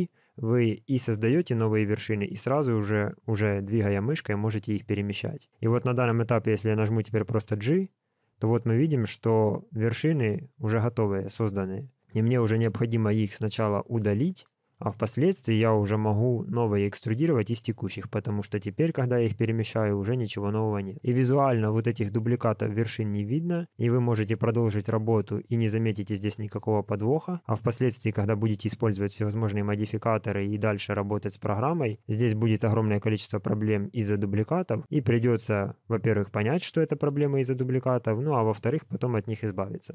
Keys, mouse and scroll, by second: 15.0 alt+click, 16.0 g, 18.3 g.